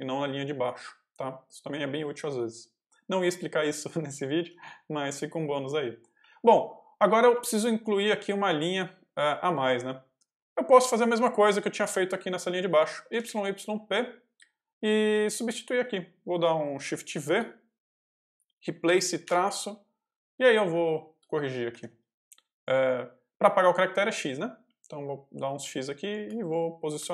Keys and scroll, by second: 3.8 k, 5.8 j, 6.1 k, 6.9 j, 7.3 k, 9.0 j, 9.3 k, 11.7 j, 12.3 k, 13.0 y, 13.5 p, 15.0 k, 17.0 shift+v, 18.8 r, 19.1 -, 20.7 i, 21.0 x, 21.6 Escape, 22.0 x, 24.0 x, 25.9 i, 26.1 space.